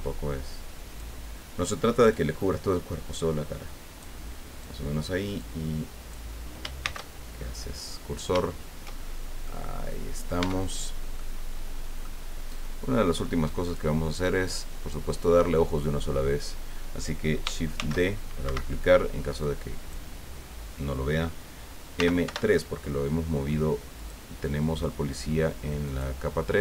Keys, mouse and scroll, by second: 2.1-4.2 drag, 4.6 click, 5.4 click, 6.8 shift+c, 7.4-7.8 shift+scroll up 3, 7.9 scroll down 2, 8.5-9.3 shift+scroll down 4, 9.4-10.5 drag, 10.4 Tab, 10.8-11.1 scroll down 3, 11.1-12.2 middle drag, 13.6 click, 14.4 right click, 17.7 shift+d, 18.4 Escape, 19.4 click, 21.9 m, 22.2 3, 23.9 click, 25.8 click.